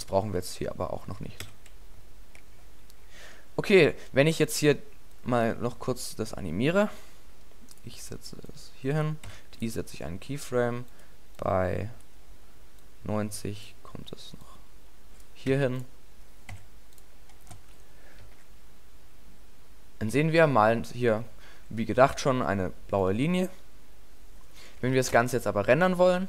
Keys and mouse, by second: 1.5 a, 9.3 i, 15.5 i, 16.5 i, 18.3 alt+a, 25.0 alt+a, 25.1 KP_0.